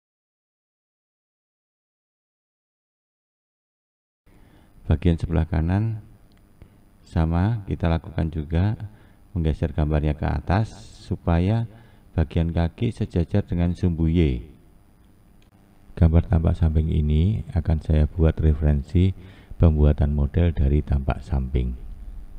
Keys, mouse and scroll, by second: 2.0-2.3 scroll down 7, 2.5 scroll up 4, 3.5 ctrl+space, 5.8-7.1 scroll up 2, 8.1-8.6 scroll down 1, 8.6-11.3 scroll up 2, 13.4-16.6 scroll down 1, 16.6-17.1 scroll down 1, 17.1 click.